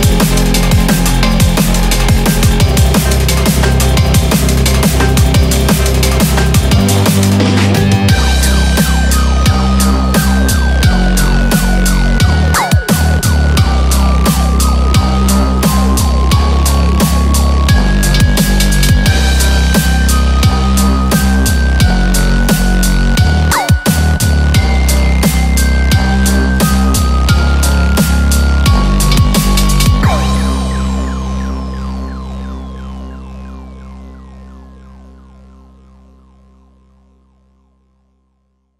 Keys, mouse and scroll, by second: 1.6 scroll down 3, 5.9 4, 6.0 5.